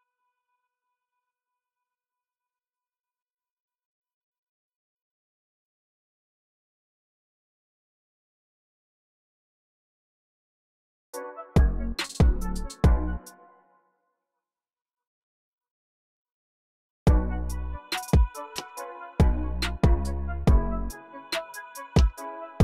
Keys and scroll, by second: 4.2-5.5 typing, 7.4 typing, 8.2 super+r, 12.9 space, 13.9 ctrl+alt+b, 14.1 alt+Right, 15.6 alt+Right, 15.8 alt+Right.